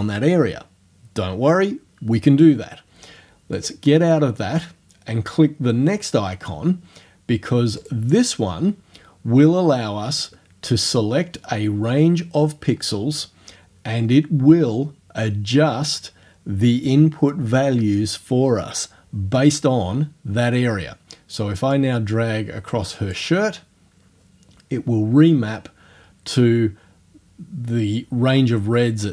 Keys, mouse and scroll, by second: 3.6 click, 7.8 click, 21.8-23.3 drag.